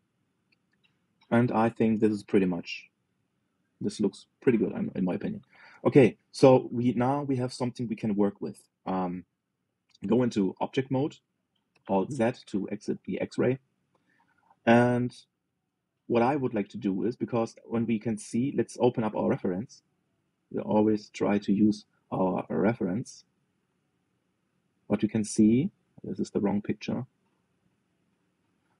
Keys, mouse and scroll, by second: 0.3-2.3 scroll up 2, 5.4-6.1 scroll down 4, 6.1 shift+middle click, 7.0-7.4 scroll down 2, 7.4-10.3 shift+middle drag, 10.7 Tab, 12.4 alt+z, 13.2 middle click, 13.8-14.8 scroll up 2, 14.8-18.5 middle drag.